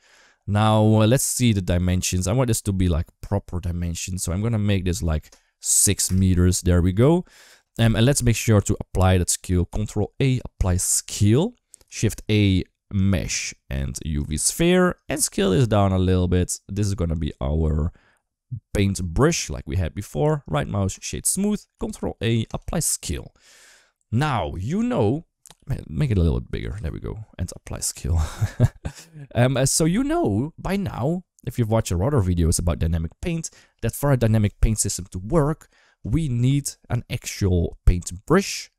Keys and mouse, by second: 1.1 click, 4.8-5.9 drag, 9.5 ctrl+a, 11.7 shift+a, 15.0 s, 20.2 right click, 21.6 ctrl+a, 25.4 s, 26.6 ctrl+a, 27.3 s, 27.8 ctrl+a.